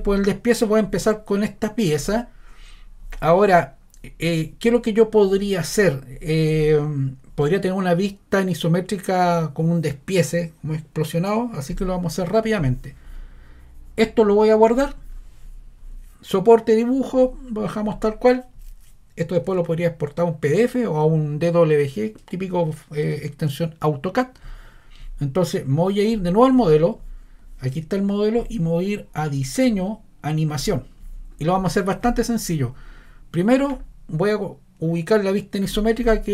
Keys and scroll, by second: 6.1-6.9 typing.